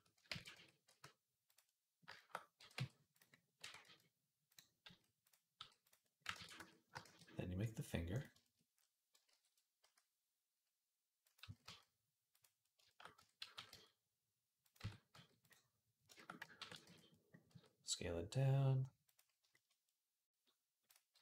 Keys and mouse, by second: 0.1 ctrl+a, 0.2-6.0 middle drag, 0.7 r, 2.4 g, 3.4 r, 4.6 s, 5.4 g, 6.0 ctrl+click, 6.2 ctrl+a, 6.2 middle click, 6.7 shift+click, 6.8-8.1 shift+middle drag, 6.8 shift+a, 8.1 shift+click, 8.3 middle click, 8.9 alt+click, 9.1 alt+g, 9.3 middle click, 9.6 s, 11.2 s, 13.0 Tab, 13.2 a, 13.3 g, 14.6 Tab, 14.9 s, 16.4 ctrl+a, 17.3 s, 20.9 s.